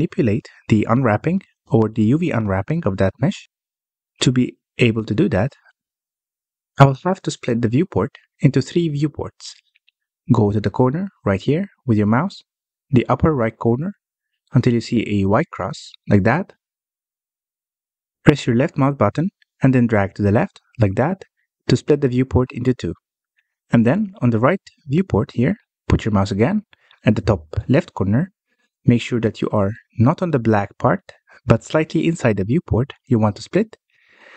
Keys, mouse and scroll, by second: 5.7-8.7 drag, 19.5-22.5 drag.